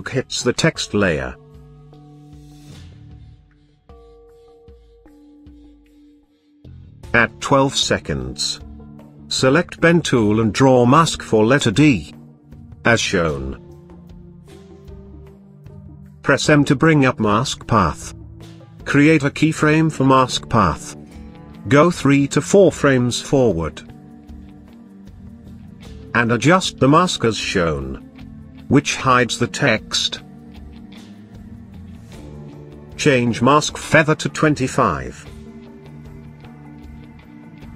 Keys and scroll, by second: 16.0 m.